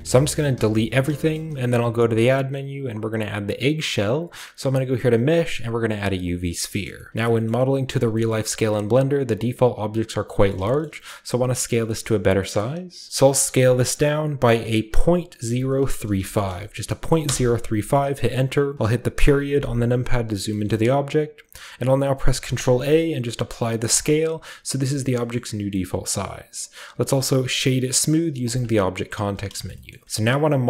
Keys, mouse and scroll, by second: 0.0 ctrl+alt+Left, 0.0-1.8 typing, 0.8-2.5 drag, 1.3-2.5 shift+scroll up 1, 2.5-3.0 shift+scroll up 1, 6.2-7.1 drag, 7.1-8.0 shift+scroll up 1, 8.0-10.2 shift+scroll up 1, 10.5 shift+middle click, 10.8-11.8 shift+middle drag, 12.0-12.4 middle drag, 12.6-14.9 middle drag, 13.4 s, 14.9-16.1 typing, 17.2 Return, 19.1 ., 20.3-21.7 scroll down 1, 20.7-21.8 middle drag, 21.7 ctrl+scroll down 1, 22.4 ctrl+a, 23.9-25.1 drag, 25.1-25.7 middle drag, 25.8-28.4 middle drag, 26.9 w, 28.4-29.7 drag, 29.7-30.0 shift+middle drag.